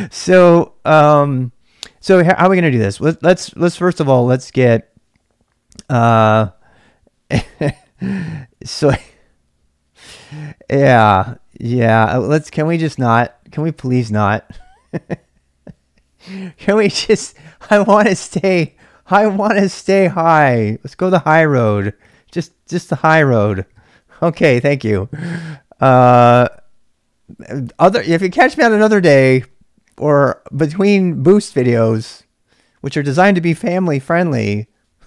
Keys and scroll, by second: 0.0-0.5 typing, 7.2-8.8 typing, 11.2-12.2 typing.